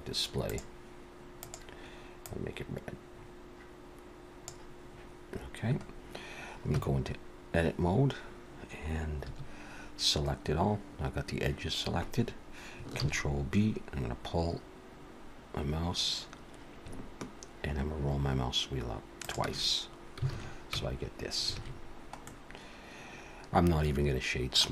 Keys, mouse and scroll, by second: 0.4 scroll down 1, 0.5 click, 1.4 click, 5.8-6.7 scroll up 1, 6.7 Tab, 6.7-8.8 scroll up 1, 9.2 2, 10.2-10.5 scroll up 2, 13.0 ctrl+b, 20.3 alt+a, 20.7 Tab, 21.5 alt+a, 21.8-22.5 scroll down 2, 22.2 middle click.